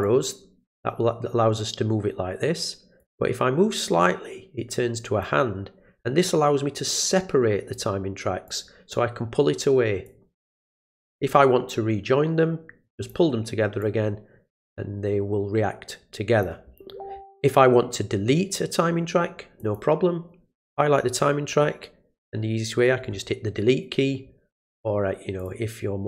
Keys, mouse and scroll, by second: 0.0-3.0 drag, 5.2-7.7 drag, 8.4 click, 10.0-13.1 drag, 13.8-16.4 drag, 19.6 click, 24.5 click, 25.4 click.